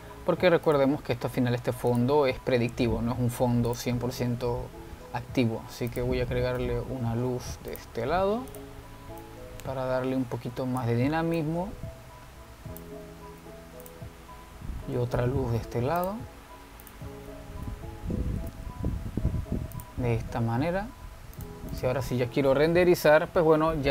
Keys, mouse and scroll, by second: 1.8-5.0 drag, 5.5 shift+a, 7.8 g, 9.6-14.6 drag, 14.6 g, 16.3 shift+d, 18.0-19.1 drag, 19.1 0, 19.2 0, 20.9 click, 22.6 click.